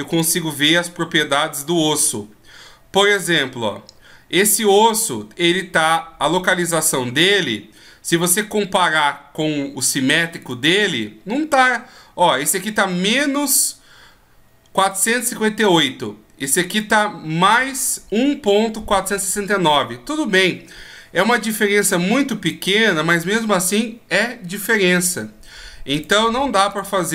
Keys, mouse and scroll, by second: 0.1 right click, 1.2-1.5 scroll up 4, 2.5-3.2 scroll up 12, 10.4 right click, 16.7 right click, 25.9 right click, 26.7 right click.